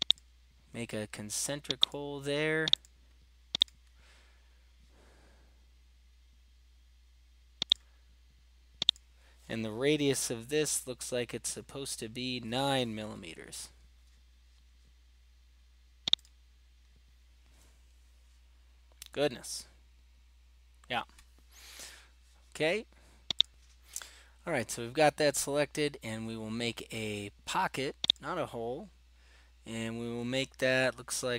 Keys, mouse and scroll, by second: 0.3-2.8 drag, 3.6 right click, 7.7 click, 8.9 click, 10.4-11.9 scroll, 13.5 9, 16.3 click, 19.2-20.2 scroll, 20.2 middle click, 23.5-29.3 drag.